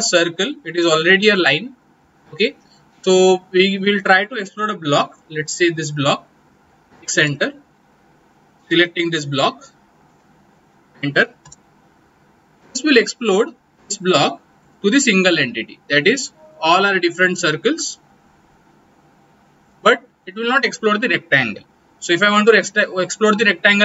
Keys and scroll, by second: 6.9 x, 7.1 space, 11.4 space.